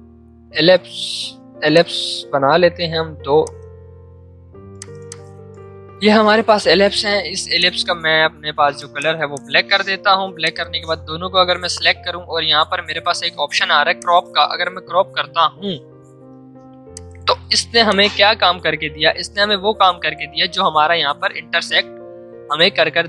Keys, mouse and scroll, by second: 1.2 typing, 1.7 shift+click, 2.7 v, 3.4 alt+click, 3.6 alt+Caps_Lock, 4.7 click, 8.9 click, 16.9-20.7 drag.